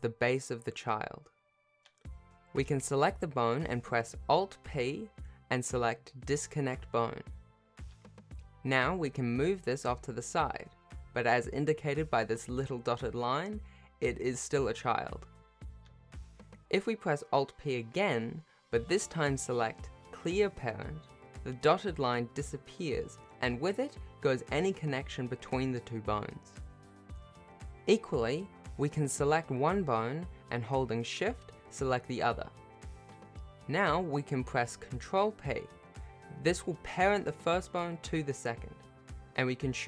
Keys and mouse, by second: 1.6 shift+middle click, 2.0 click, 2.6 g, 4.8 click, 6.1 alt+p, 9.4 g, 15.4 shift+click, 16.5 ctrl+p, 17.4 alt+p, 19.9 click, 20.2 g, 24.8 r, 25.5 click, 29.9 click, 30.5 shift+click, 31.5 ctrl+p, 34.9 g, 36.8 click, 37.4 r.